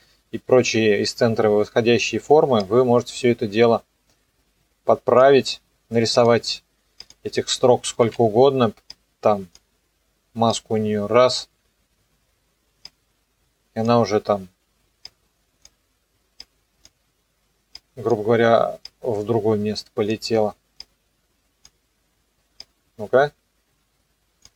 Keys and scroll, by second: 8.1 ctrl+d.